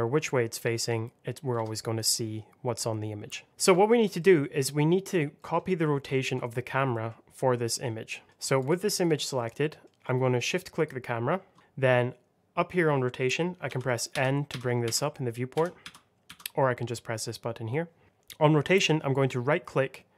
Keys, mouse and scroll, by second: 1.4 Escape, 2.2 scroll down 1, 3.5 middle click, 3.7 shift+middle click, 4.1 middle click, 6.0 shift+middle click, 6.3 scroll up 1, 6.8 middle click, 8.2 shift+middle click, 8.5 click, 9.3 middle click, 10.0 shift+middle click, 13.6 n, 17.1 click, 18.6 right click.